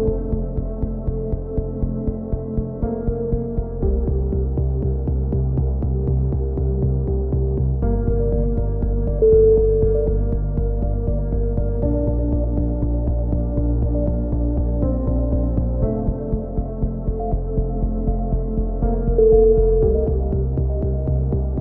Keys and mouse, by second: 0.0-1.4 right drag, 1.1 f, 1.4 a, 1.8-3.3 drag, 3.1 z, 3.3 middle click, 3.7 click, 4.5 right click, 4.7 f, 5.0 a, 5.6-7.1 drag, 6.0 right click, 6.4 x, 7.5 click, 8.3-10.0 right drag, 8.3 f, 9.5 f, 9.6 a, 9.7 z, 10.0 Tab, 11.5-13.7 drag, 14.0-16.3 drag, 17.0 Tab, 18.0 z, 18.4 z, 18.9 Tab, 19.3 Tab, 19.6 z.